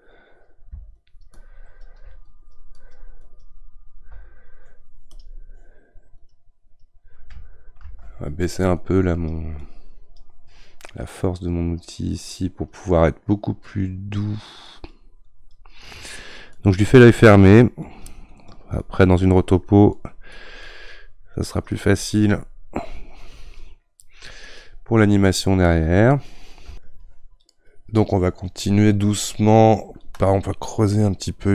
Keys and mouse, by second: 7.8 ctrl+z, 8.8-31.5 drag.